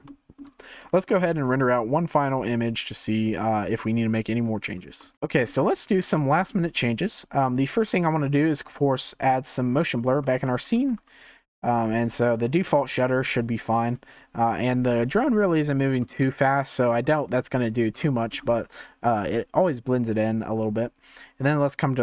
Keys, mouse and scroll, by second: 0.0-2.7 shift+middle drag, 5.1 scroll down 1, 5.2 shift+middle click, 5.7-6.1 scroll up 1, 6.1-9.8 shift+middle drag, 9.8-16.2 drag, 16.2-17.2 shift+middle drag, 17.2-18.0 scroll up 1, 18.0-22.0 shift+middle drag.